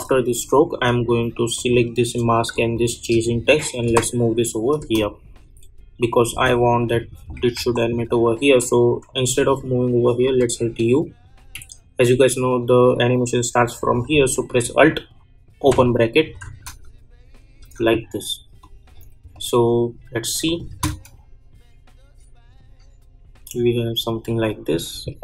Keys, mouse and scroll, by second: 1.5 click, 3.8 [, 4.8 space, 7.5 ctrl+z, 10.2 u, 11.4 k, 15.6 alt+[, 16.4 space, 18.6 click, 20.7 space, 25.1 space.